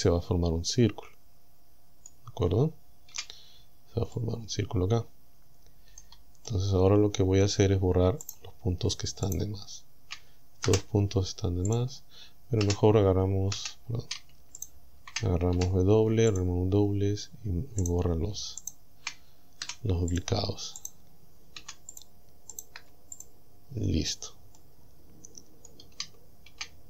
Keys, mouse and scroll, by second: 0.0-2.3 middle drag, 3.1 KP_Decimal, 4.2-6.2 middle drag, 6.5-7.6 middle drag, 8.3 right click, 9.3 shift+right click, 10.7 Delete, 11.7 click, 12.7 a, 13.6 a, 14.6 alt+shift+right click, 15.6 w, 16.3 click, 17.9 right click, 18.7 shift+right click, 19.7 Delete, 20.2 click, 20.9 right click, 21.6 Delete, 22.0 click, 22.6 right click, 22.8 Delete, 23.2 click, 24.1 scroll down 2, 24.6-25.9 middle drag.